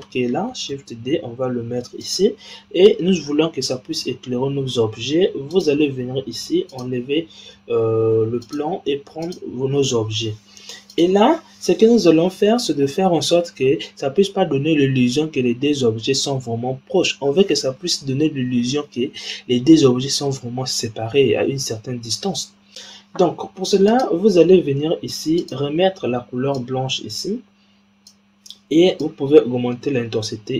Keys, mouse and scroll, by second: 0.7 shift+d, 5.4 click, 6.6 click, 8.3 click, 10.8 click, 12.0-12.5 scroll up 4, 12.5-15.5 scroll down 2, 23.8-25.4 drag, 28.9-30.5 drag.